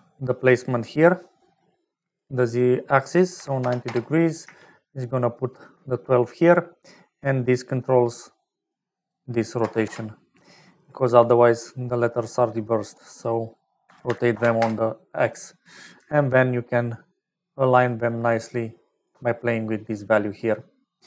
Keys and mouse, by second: 2.5-5.8 drag, 7.4-8.6 drag, 9.0-10.4 drag, 13.1-14.6 drag, 15.2-16.7 middle drag, 19.0-20.1 shift+middle drag.